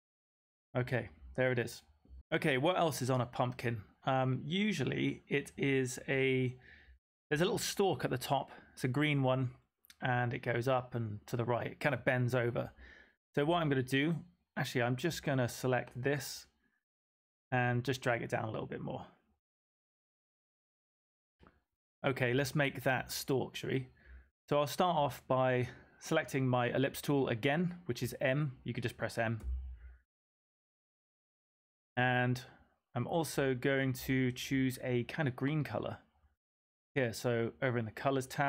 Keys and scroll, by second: 29.3 typing.